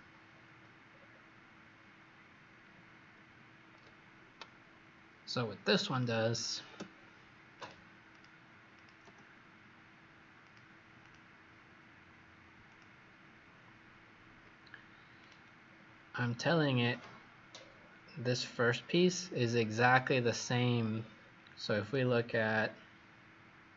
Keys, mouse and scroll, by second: 0.8-1.5 scroll down 3, 1.5 scroll up 1, 2.6-3.2 scroll down 1, 5.8 click, 7.5 click, 8.0 click, 8.6 click, 10.3 click, 10.9 click, 12.6 click, 15.5 scroll down 2, 16.8 click, 17.5-18.2 scroll down 2, 19.9 click, 20.9 scroll down 4, 21.7 click, 22.5 scroll up 3.